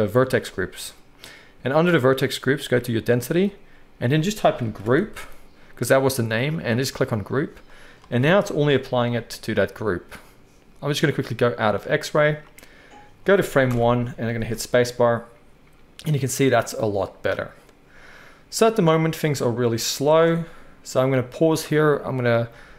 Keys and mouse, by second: 13.7 shift+Left, 14.4 space, 20.3 space.